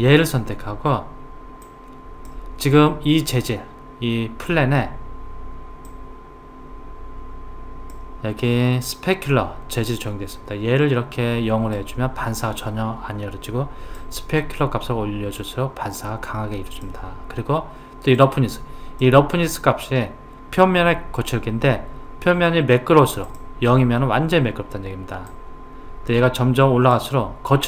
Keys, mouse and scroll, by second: 1.7 click, 5.9 click, 9.9 click, 14.0 click, 18.2 click, 25.3-27.6 drag.